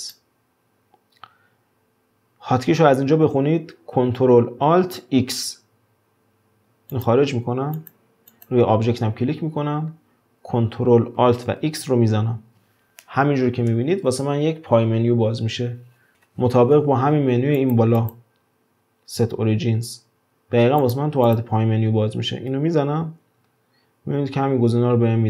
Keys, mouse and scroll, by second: 7.8 click, 8.3 click, 9.2-11.7 scroll up 2, 11.7 ctrl+alt+x, 18.0-21.0 drag, 21.2 click, 22.5 ctrl+alt+x.